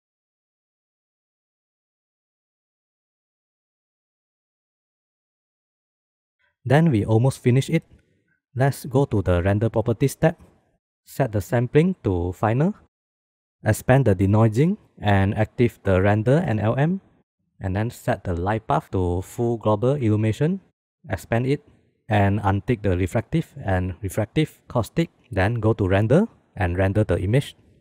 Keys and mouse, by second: 1.1 middle click, 5.0 shift+middle click, 6.3 click, 11.1-12.8 drag, 13.6 click, 15.9 click, 17.8-20.9 drag, 21.7 click, 23.2 click, 24.9 click, 26.3-27.8 drag.